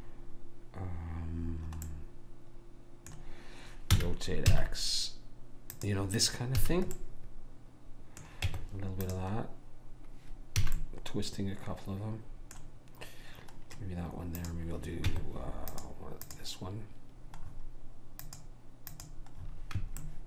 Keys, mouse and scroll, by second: 2.0 middle click, 4.0 r, 6.7 a, 8.5 Tab, 10.8 a, 14.5-18.2 drag, 15.2 Tab, 18.1 middle click, 18.4-20.2 drag, 20.1-20.2 right drag.